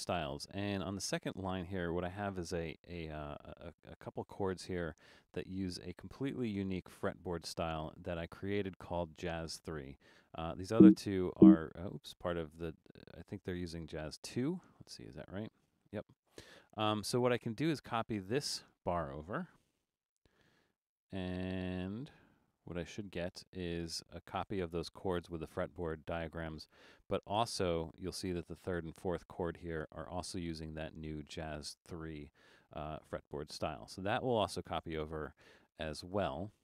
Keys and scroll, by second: 6.0 Return, 14.9 Return, 17.4 Escape, 19.6 super+c, 23.2 super+v, 29.3 Return, 33.1 super+z.